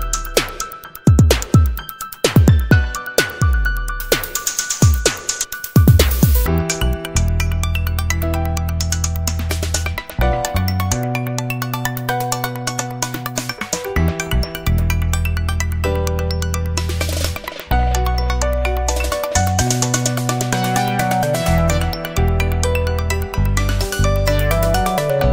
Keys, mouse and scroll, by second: 5.7 click, 6.2 click, 6.9 scroll up 1, 8.0 click, 9.0 click, 10.4 click, 11.4 click, 12.3 click, 12.8 middle click, 14.2 click, 15.8 click, 16.6 click, 18.3 right click, 18.9 Escape, 20.8 click, 22.2-24.5 drag, 24.8-25.2 scroll up 1.